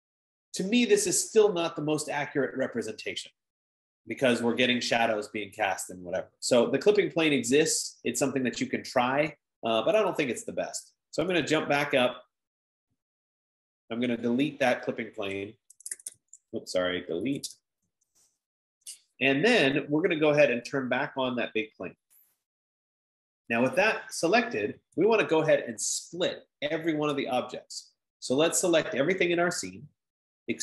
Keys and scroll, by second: 14.2 F15, 15.9-18.4 typing, 25.8 Escape.